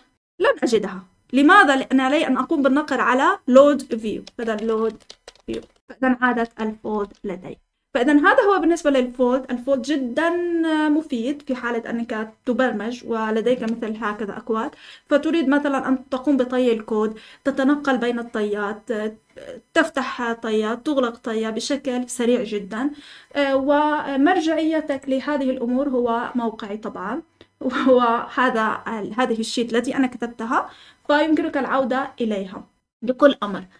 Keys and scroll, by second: 0.0-0.6 typing, 4.0-6.8 typing.